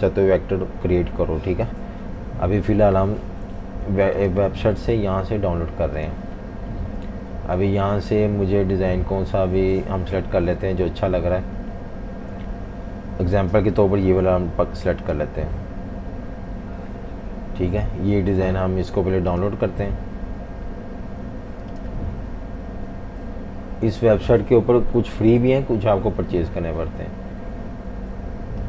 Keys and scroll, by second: 2.0 F19.